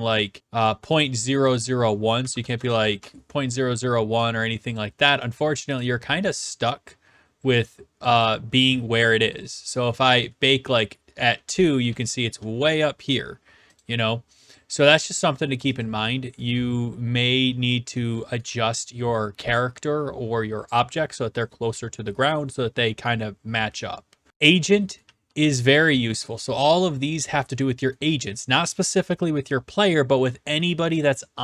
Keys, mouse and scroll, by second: 0.2 click, 0.6 click, 0.9 click, 1.5 click, 2.1-3.2 typing, 4.8 click, 5.8 click, 8.2 click, 10.0 click, 10.4-12.4 typing, 12.7 right click, 13.8 click, 14.5 click, 15.8 click, 16.5-17.4 q, 17.4-18.1 w, 18.1-19.8 right drag, 18.5 w, 24.3-25.3 middle drag, 24.9-26.9 typing, 26.4-27.5 right drag, 28.0 s, 28.4 right click.